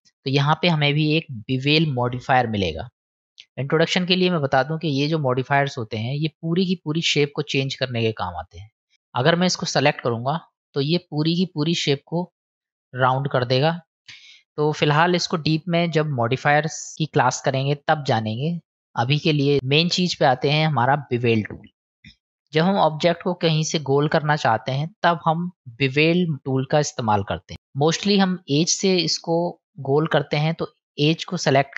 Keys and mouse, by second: 3.4-6.8 drag, 8.4 middle click, 8.9 click, 10.6 middle click, 12.0 middle click, 16.9-18.3 drag, 22.5 middle click, 23.2 middle click, 27.7 click, 29.3-31.7 middle drag.